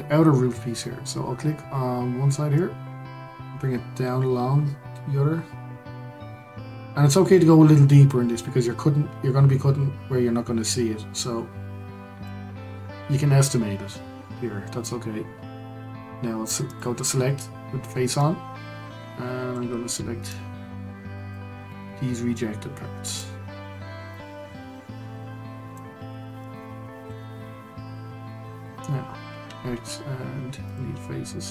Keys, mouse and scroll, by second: 2.5 click, 16.6-18.2 drag, 20.3 shift+click, 21.7 shift+click, 24.1 shift+click, 26.4 shift+click, 28.0-29.4 scroll down 2, 29.4 x, 31.2-31.5 scroll down 2.